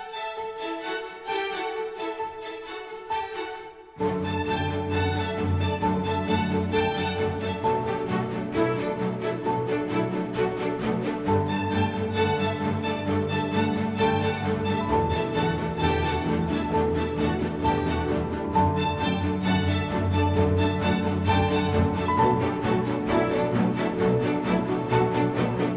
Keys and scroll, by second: 0.2 super+a, 19.1 super+v, 20.7 super+t.